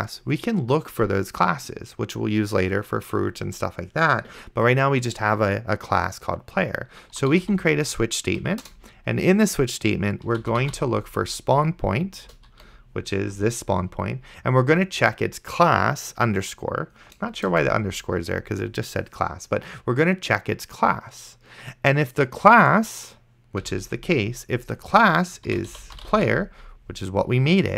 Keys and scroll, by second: 7.1-8.1 typing, 8.4 Down, 8.7 Return, 10.1-11.3 typing, 12.3 Return, 12.6 ., 17.8 Return, 23.9 ;, 25.5-26.9 typing.